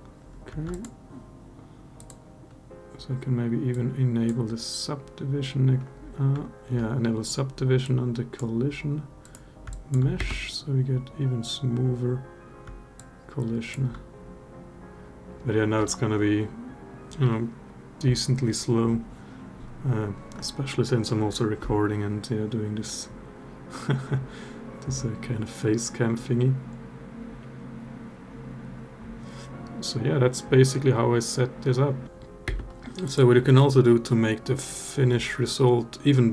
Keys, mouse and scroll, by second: 0.5 click, 1.8 click, 3.5 click, 7.7-8.2 drag, 9.5 alt+drag, 9.9 space, 13.3 alt+click, 32.2 space, 32.8 click.